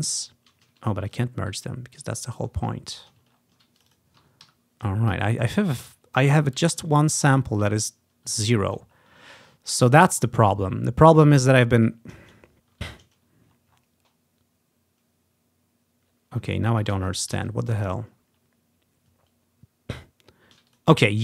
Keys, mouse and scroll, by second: 0.6 ctrl+z, 2.5-2.9 ctrl+scroll down 2, 3.4 scroll down 1, 3.9 click, 4.6 Delete, 4.6 typing, 5.3-5.9 ctrl+scroll down 2, 6.3-7.2 ctrl+scroll down 2, 7.9-8.4 ctrl+scroll down 2, 8.8 click, 9.0 scroll up 1, 9.8-11.3 scroll up 5, 12.5 scroll up 1, 13.6-14.4 scroll down 1, 16.1 scroll down 1, 16.6 ctrl+z, 17.1 ctrl+z, 17.5 ctrl+z, 18.0 ctrl+scroll up 1, 20.8 click.